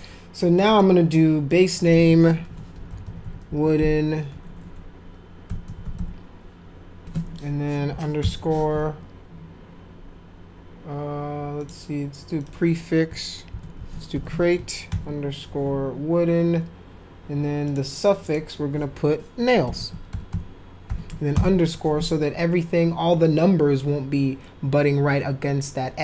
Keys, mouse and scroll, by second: 0.6 click, 1.5 click, 2.2-6.4 typing, 8.2 shift+-, 11.6 click, 12.4 click, 13.2-14.9 typing, 17.7 click, 18.2 click, 19.4-21.3 typing.